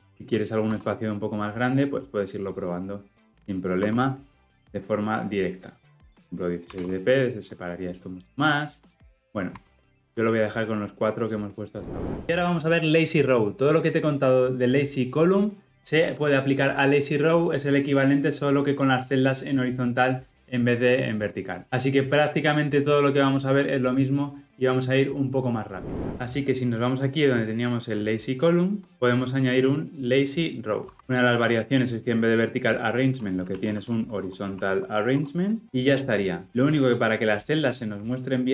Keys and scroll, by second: 31.0 Return, 35.2 Tab.